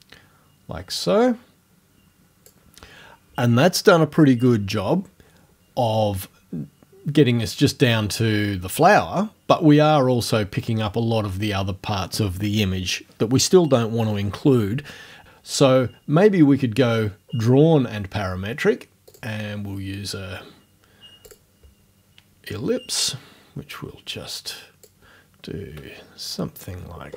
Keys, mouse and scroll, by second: 17.2 scroll down 1, 19.1 click, 21.3 click, 23.1-25.1 drag, 26.6-27.1 scroll down 1.